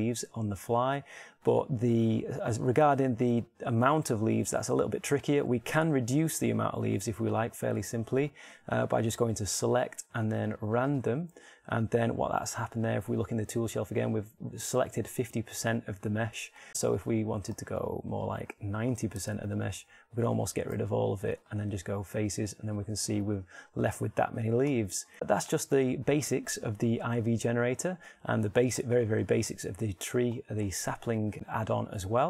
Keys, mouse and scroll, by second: 10.5-12.0 drag, 12.9-19.7 middle drag, 21.3 x, 25.2 Tab, 25.5-31.4 middle drag, 31.8-32.2 middle drag.